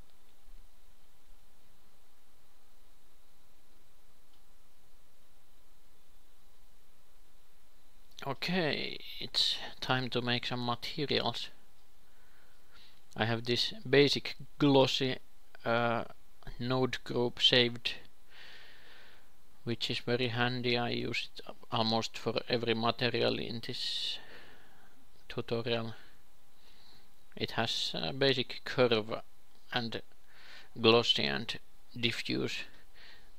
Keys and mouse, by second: 5.4-7.0 drag, 7.0 shift+F3, 9.8 x, 10.5 shift+a, 12.0 x, 12.5 alt+g, 14.0-18.0 drag, 25.5-27.6 drag, 27.6 ctrl+c, 30.5 ctrl+c, 31.8 ctrl+v.